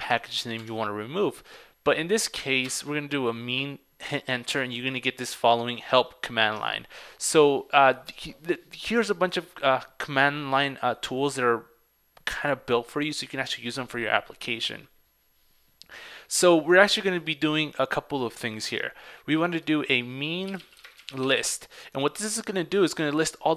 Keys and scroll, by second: 0.7 super+Tab.